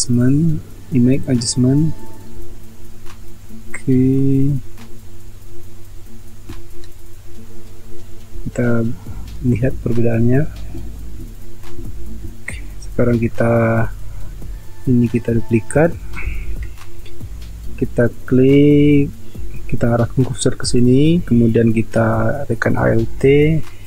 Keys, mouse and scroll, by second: 16.4 ctrl+j.